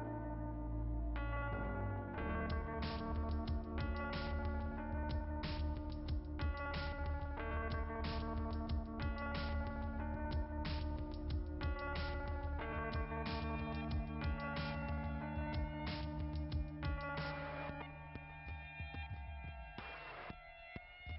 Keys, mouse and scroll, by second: 0.0 click, 1.6-2.4 scroll down 4, 1.8 middle click, 2.1 middle click, 2.4 middle click, 3.3 scroll down 1, 4.0 middle click, 5.3-8.1 scroll up 14.